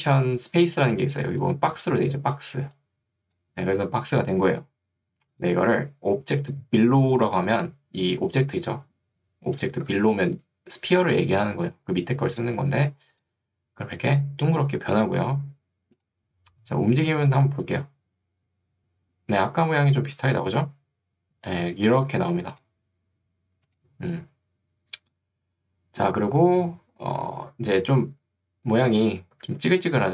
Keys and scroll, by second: 2.0 ctrl+Escape, 2.6 ctrl+2, 3.8 Escape, 11.8 Escape, 29.6 ctrl+2.